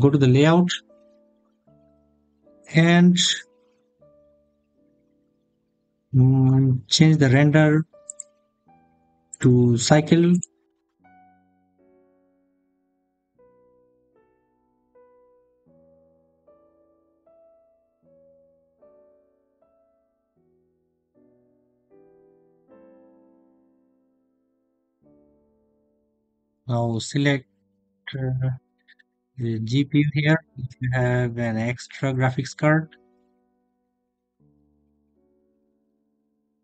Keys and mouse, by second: 0.0 right click, 3.1 drag, 7.9 click, 9.2-21.1 drag, 27.4-32.5 drag.